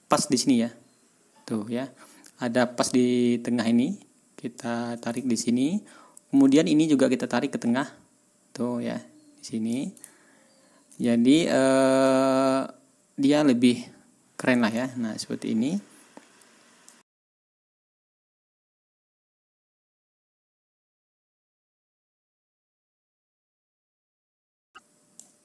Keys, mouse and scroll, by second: 5.1-5.6 ctrl+scroll down 2, 5.8-6.1 ctrl+scroll up 2, 7.1-9.8 drag, 10.0 ctrl+scroll down 2, 10.5 ctrl+scroll up 2, 12.0-14.5 drag, 14.7-15.0 ctrl+scroll down 2, 15.3 ctrl+scroll up 2, 16.8 scroll up 2, 16.9 click, 17.8 ctrl+scroll up 2, 18.2 click, 19.0 ctrl+scroll up 2, 19.4 click, 20.2 ctrl+scroll up 2, 20.5-21.8 drag, 22.0 ctrl+y, 22.4 click, 23.1 ctrl+scroll down 2, 23.3 ctrl+scroll up 2, 23.9-25.3 middle drag.